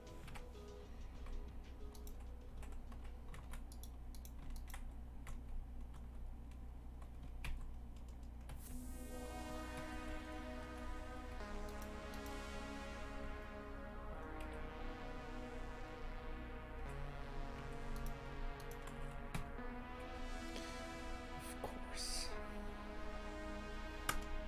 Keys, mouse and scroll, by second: 0.3 KP_Divide, 1.1 2, 1.9 right click, 2.5 e, 4.1 right click, 4.5 shift+right click, 4.8 f, 5.3 Tab, 6.0 Tab, 7.5 ctrl+t, 8.5 ctrl+z, 8.7 ctrl+z, 10.6 Tab, 11.7 right click, 12.5 Tab, 13.2 a, 17.6 1, 17.9 right click, 18.6 shift+right click, 19.3 j, 24.1 KP_0.